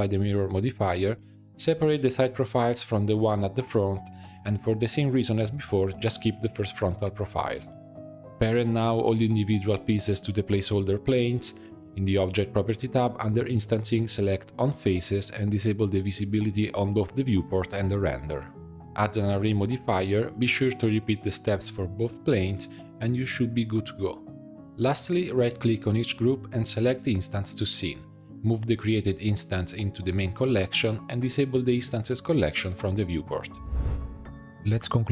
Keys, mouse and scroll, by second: 0.0 l, 0.5 l, 1.1 p, 1.8 Tab, 1.9 BackSpace, 3.3 click, 4.2 click, 4.4 middle drag, 4.6 Tab, 4.8 click, 5.5 l, 5.9 x, 6.4 Tab, 6.6-7.3 middle drag, 7.3 drag, 7.4 scroll up 1, 7.5 click, 7.8 shift+click, 8.6 ctrl+p, 9.9-10.8 shift+drag, 10.8 ctrl+p, 11.4 click, 11.7-13.4 middle drag, 13.4 click, 14.3 click, 15.1-15.6 drag, 15.9 click, 17.2 click, 17.7-23.3 drag, 24.0-26.3 right drag, 27.0-28.4 drag, 28.5-30.9 right drag, 31.2-34.1 drag, 34.1 alt+\.